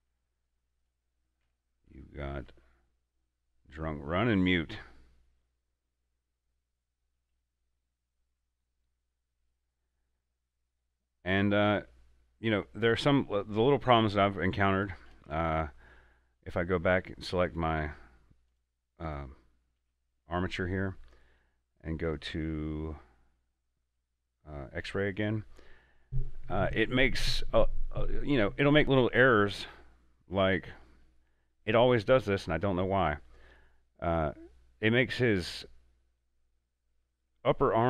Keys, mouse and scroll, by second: 1.0 right click, 1.6 Tab, 2.6 alt+a, 8.5-12.0 middle drag, 12.0-14.1 middle drag, 14.1 Tab, 15.3 alt+a, 15.9 scroll up 1, 16.4 scroll down 1, 17.1 right click, 17.9 Tab, 18.6 right click, 19.9 Tab, 22.2-25.1 drag, 30.4 click, 30.4 scroll up 1, 30.9 shift+middle click, 31.4-32.2 scroll up 2, 32.7 shift+middle click, 33.0-34.3 shift+scroll down 3, 34.3 right click, 35.1 scroll down 1.